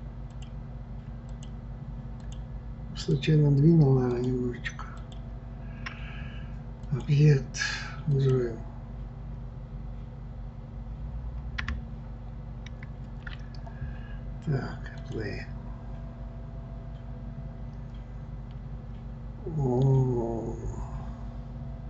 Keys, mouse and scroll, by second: 0.3 shift+click, 1.3 shift+click, 2.2 shift+click, 3.1 shift+click, 4.1 shift+click, 5.0 shift+click, 6.8-9.9 drag, 12.7 ctrl+z, 15.0 click.